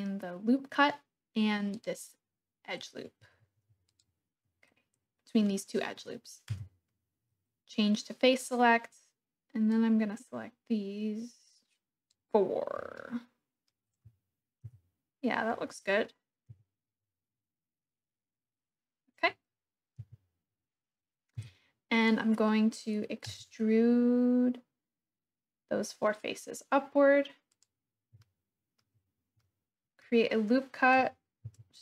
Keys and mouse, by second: 1.8 click, 3.8 alt+shift+click, 6.5 3, 9.7-12.1 drag, 12.9 click, 14.6 KP_1, 15.4 middle click, 16.5 KP_3, 20.0 KP_7, 21.3 KP_1, 23.2 e, 27.5 click, 28.3 shift+click, 29.4 click, 31.4 ctrl+r.